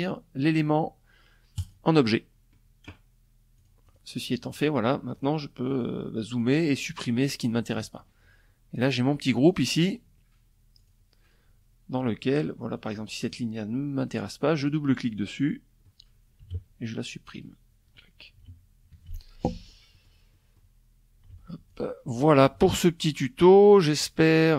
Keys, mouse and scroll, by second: 0.1 click, 2.1 click, 3.1 click, 3.7 click, 4.2 middle click, 4.9 click, 6.1 middle click, 7.9 click, 8.3 click, 9.3 click, 11.3 click, 11.8 click, 13.1 click, 13.6 click, 14.9 Delete, 15.8 click, 16.9 Delete, 17.4 KP_Subtract, 18.5 click, 18.9 click, 19.9 ctrl+z, 20.2 ctrl+click, 21.0 KP_Subtract, 21.7-22.7 drag, 22.9 click.